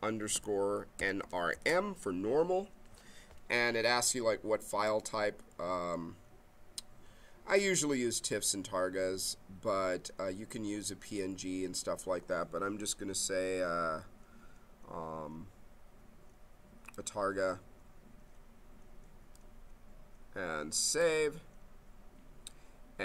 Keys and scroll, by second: 0.3-2.0 typing.